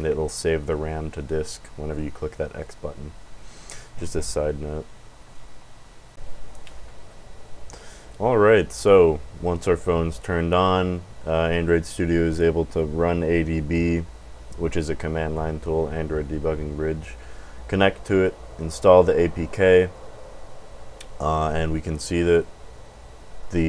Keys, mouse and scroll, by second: 21.2 click.